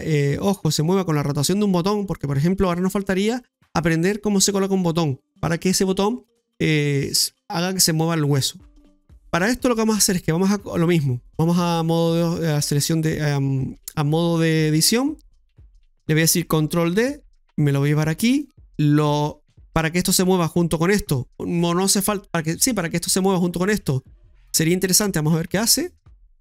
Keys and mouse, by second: 0.4 middle click, 1.5-2.7 shift+middle drag, 11.5 click, 14.4 right click, 15.8 middle click, 16.1 click, 16.9 shift+d, 19.3 middle click, 25.1 click.